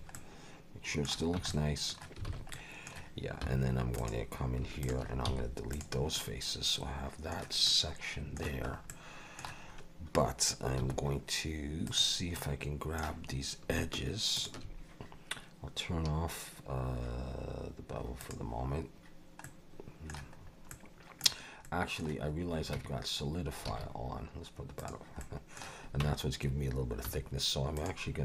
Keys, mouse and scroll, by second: 0.1 middle click, 1.4 Tab, 1.5 middle click, 2.3 alt+a, 2.5 middle click, 3.4 3, 4.0 click, 4.8 shift+click, 5.3 x, 6.2 middle click, 7.7 middle click, 8.7 scroll up 2, 8.9 middle click, 9.7 scroll up 2, 10.8 2, 11.9 click, 12.4 middle click, 14.4 shift+click, 18.2 click, 19.0-19.4 scroll down 2, 19.4 middle click, 20.4 scroll up 2, 20.7 middle click, 21.6 middle click, 22.8 Tab, 23.2-23.5 scroll down 2, 23.7 alt+a, 24.9 click, 25.2 middle click, 26.0 Tab, 27.1 1, 27.7 click.